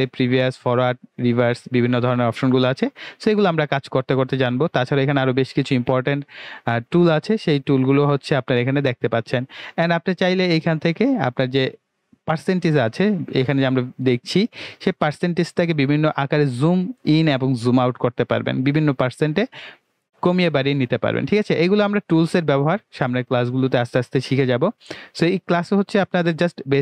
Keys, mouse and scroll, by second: 10.9 click, 10.9 typing, 21.6 click, 21.6 typing.